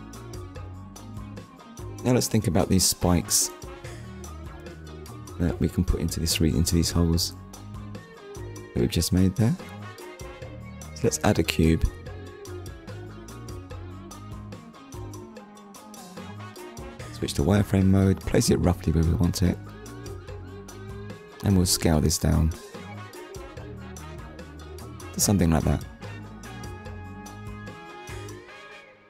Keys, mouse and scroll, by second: 0.8 middle click, 3.0-3.4 scroll up 1, 3.8 middle click, 5.2 middle click, 7.9 middle click, 8.6 scroll down 1, 9.2 shift+a, 10.8 click, 11.7 scroll down 1, 12.6 scroll down 1, 14.3 KP_1, 15.7 click, 16.2 shift+middle click, 17.1 click, 23.7 click, 24.3-24.7 scroll up 2, 25.4 shift+middle click, 28.2 click.